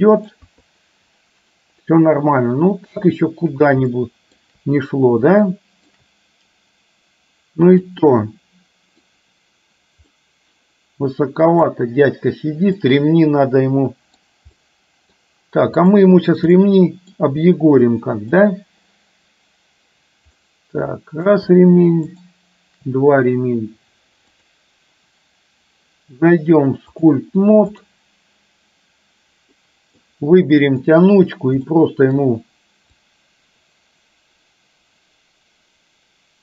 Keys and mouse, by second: 0.6 KP_3, 4.0-4.5 shift+middle drag, 5.6-6.0 shift+middle drag, 8.0-9.2 middle drag, 10.2-11.7 middle drag, 13.0-14.2 middle drag, 14.6-15.2 middle drag, 15.8 click, 16.6-17.3 middle drag, 17.8-18.5 middle drag, 20.5 middle click, 22.2 shift+click, 24.5 click, 27.1-28.1 drag, 29.6 middle click, 31.0 click, 31.7 middle click, 33.1-36.4 drag.